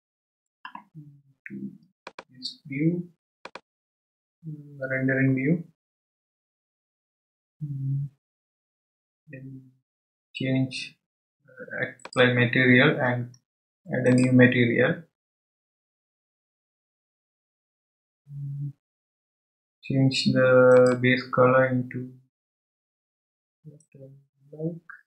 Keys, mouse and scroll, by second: 2.1 click, 5.8-6.7 drag, 12.0 click, 14.1-18.0 drag, 20.7 click.